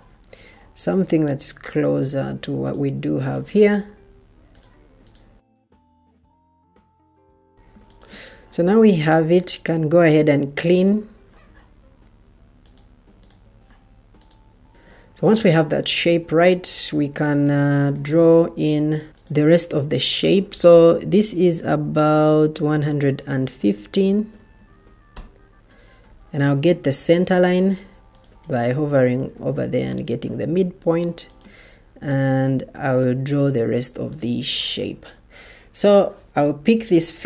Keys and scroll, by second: 14.7 Escape, 23.4-24.3 typing, 27.1 Return.